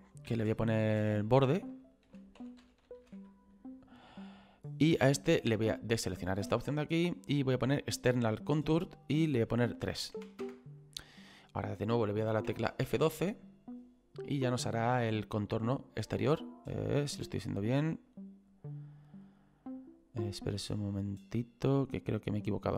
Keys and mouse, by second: 0.4 click, 2.4 o, 4.3 click, 5.9 click, 9.2 click, 10.1 KP_3, 10.4 Return, 10.4 KP_Enter, 12.9 F12, 18.1 click.